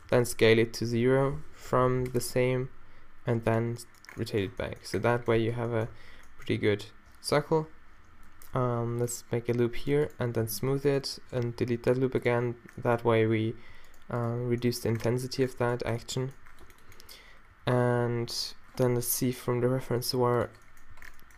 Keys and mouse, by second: 0.1 s, 2.5 r, 5.4 q, 6.0 z, 8.7 ctrl+r, 9.9-11.4 drag, 10.4 q, 11.4 x, 13.1 a, 14.7 click, 16.9 z, 17.5 z, 18.9 z, 19.4 g, 20.9 z.